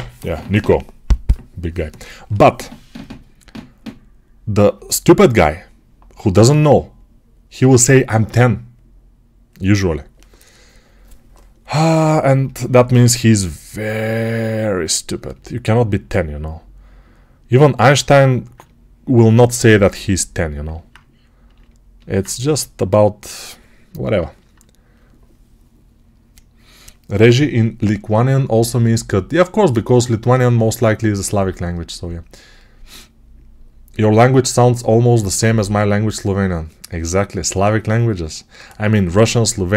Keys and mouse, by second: 11.8-16.1 alt+drag, 13.1 g, 16.1-39.7 right drag, 19.2 1.